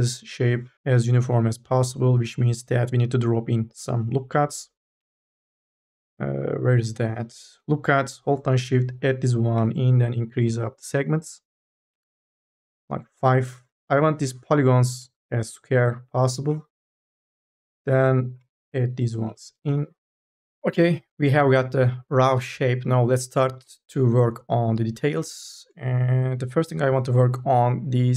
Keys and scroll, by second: 14.4 3, 14.6 4, 14.9 e, 15.7 3, 16.8 k, 19.3 w, 19.5 e, 27.4 1.